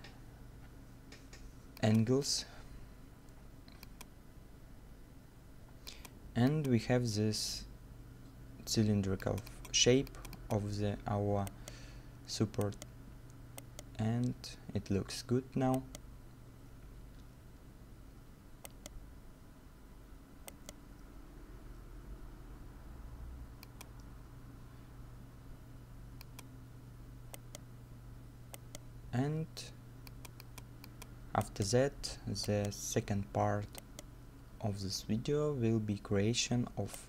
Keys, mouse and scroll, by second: 11.5 right click, 12.2 middle click, 12.6 right click, 15.4 scroll up 1, 15.7 right click, 16.9 middle click, 18.4 scroll down 1, 18.7 right click, 26.8 right click, 27.2 scroll up 1, 27.4 right click, 28.2 middle click, 28.6 right click, 31.4 right click, 33.3 middle click, 33.7 scroll down 1, 33.9 right click, 36.6 scroll down 1, 36.9 right click.